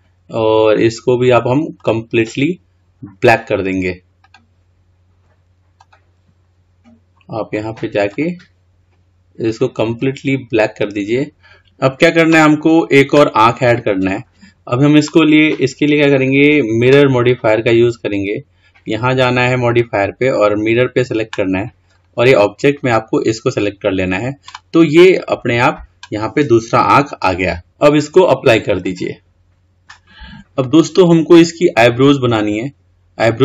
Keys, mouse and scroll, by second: 4.6-7.6 drag, 8.5 click, 16.7 click, 17.9-20.9 drag, 22.4 click, 29.1-31.0 drag, 31.0-33.4 middle drag.